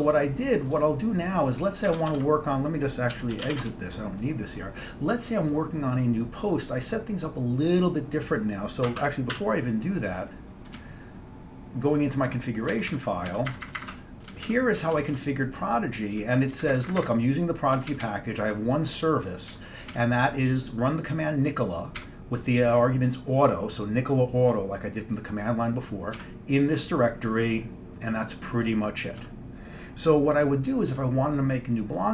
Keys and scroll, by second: 2.1 ctrl+g, 2.2 ctrl+g, 3.0-4.2 typing, 9.0 Escape, 9.1 Escape, 9.5 c, 10.9 Down, 11.4-12.5 Down, 13.0 Down, 13.4 Down, 13.6 Up, 13.7 Up, 13.9 Up, 14.0 Tab, 14.4 Down, 14.6 Down, 15.1 typing, 15.3 Down, 16.1 Down, 16.3 Down, 16.6 Up, 16.6-17.0 typing, 17.1 Up, 17.9 Down, 18.0 typing, 19.6 Down, 20.0 Down, 22.1 Down, 26.3 Down, 29.3 Down.